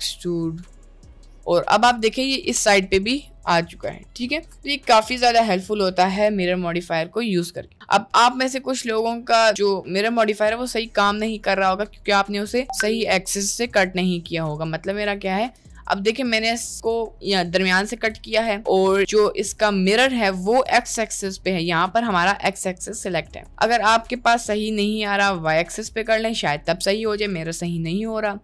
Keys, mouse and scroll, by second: 1.3 Tab, 1.3 middle drag, 1.7 middle click, 2.0 click, 2.2-2.6 middle drag, 3.0 middle click, 4.0-5.6 middle drag, 6.0 middle click, 8.5 click, 9.0 click, 10.3 click, 10.8-12.4 middle drag, 15.0 click, 15.3 click, 15.9 middle click, 16.3 Tab, 16.5 middle click, 17.1 middle click, 18.1 Tab, 18.4 middle click, 23.2 click, 26.3 middle click, 28.3 click.